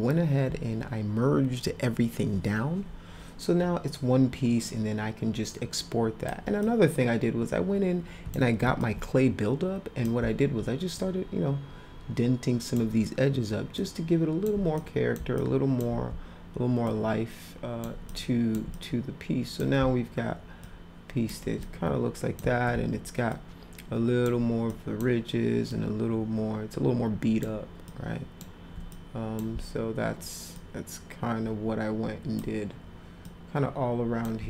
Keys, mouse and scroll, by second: 4.7-6.3 drag, 6.6-8.4 drag, 8.8-10.1 alt+drag, 11.0-12.8 alt+drag, 13.7 alt+click, 14.8 click, 15.4 alt+click, 16.8 alt+click, 18.1 alt+click, 18.7 click, 20.6 alt+click, 21.7 click, 23.3 alt+click, 24.7 alt+click, 25.7-27.4 alt+drag, 27.9 alt+click, 28.9 click, 30.5-32.4 alt+drag, 33.3 alt+click.